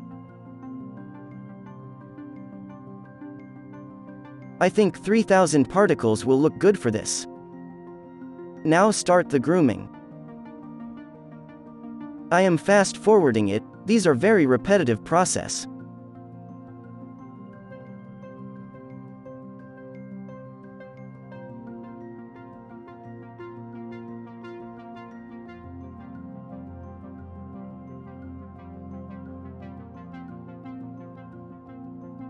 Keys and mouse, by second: 1.4-4.4 middle drag, 2.7 KP_1, 4.5-7.8 drag, 6.0-7.3 right drag, 7.3 KP_0, 7.8 KP_0, 9.2-16.2 drag, 10.3 f, 11.6-15.4 right drag, 11.8 f, 14.4-15.4 middle drag, 14.4 f, 16.3 n, 17.0-24.3 drag, 18.1-19.7 middle drag, 18.1 right click, 19.0 f, 22.4-26.2 typing, 23.6-24.7 middle drag, 24.2 right click, 25.3-29.8 drag, 26.6-28.1 right drag, 27.4 f, 28.8-29.8 right drag, 29.9 f, 30.2 f, 30.8 ctrl+z, 31.0 click, 31.0 middle click, 31.0 b, 31.4 ctrl+k, 31.5 ctrl+l, 31.8-32.2 middle drag, 31.9 b.